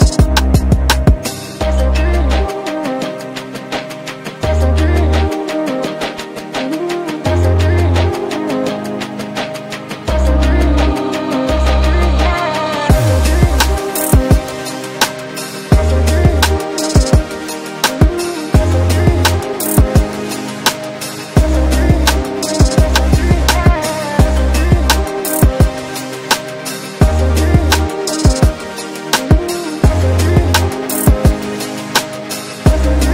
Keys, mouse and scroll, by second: 0.1-1.4 scroll up 1, 1.4 click, 4.8 ctrl+z, 5.2-9.6 drag, 9.8-15.1 drag, 15.1 ctrl+space, 15.6 scroll down 1, 16.2 click, 16.9 click, 18.3 ctrl+k, 18.8 click, 22.3 scroll up 1, 22.9 click, 23.9 scroll down 1, 25.2-27.7 drag, 27.7 right click, 28.6 x, 29.0 click, 30.9 x, 31.4 click.